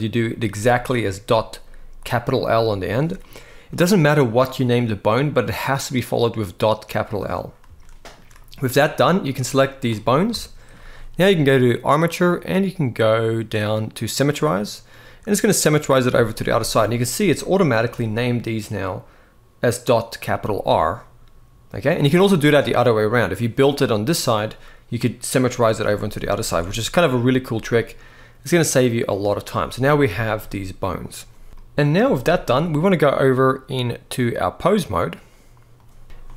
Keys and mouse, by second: 3.4 click, 7.5 shift+middle click, 8.4-9.5 drag, 10.1 shift+middle click, 11.5-14.0 drag, 15.9 shift+middle click, 20.4 click, 22.1 click, 23.5 click, 25.7 shift+middle click, 26.2 alt+a, 27.3-29.0 middle drag, 29.8 shift+middle click, 31.8 shift+middle click, 33.1-34.6 drag, 36.0 middle click.